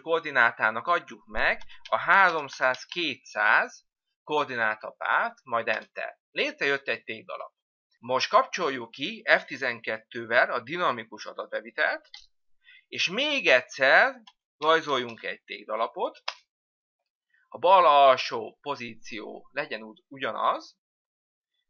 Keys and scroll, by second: 6.5 Return, 14.8 F12, 17.2 Return.